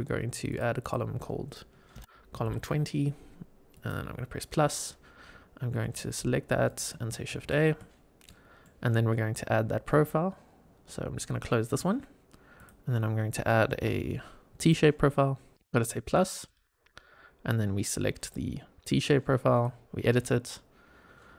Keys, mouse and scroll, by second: 5.7-6.7 drag, 7.3 shift+a, 8.2-8.6 middle drag, 11.6 click, 12.5-14.6 drag, 16.4 click, 18.2 click, 19.4 click, 20.2-20.9 scroll down 3.